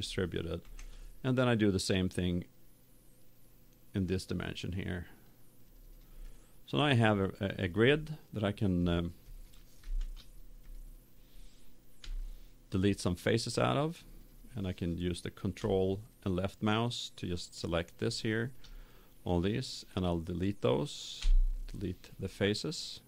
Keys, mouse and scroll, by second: 0.6 ctrl+r, 5.2-6.9 drag, 6.2-11.0 middle drag, 10.0 ctrl+Tab, 11.9 KP_7, 15.4 right click, 16.1-18.0 drag, 21.1 Delete.